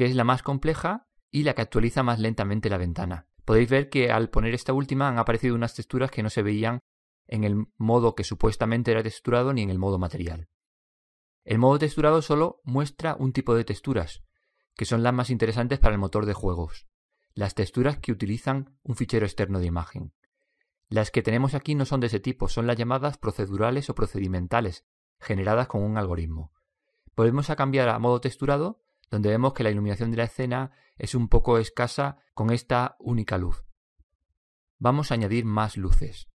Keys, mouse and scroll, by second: 1.8-2.1 middle drag, 12.5 drag, 12.8 click, 13.4 click, 30.1 click, 30.4 click, 34.3-36.2 right drag.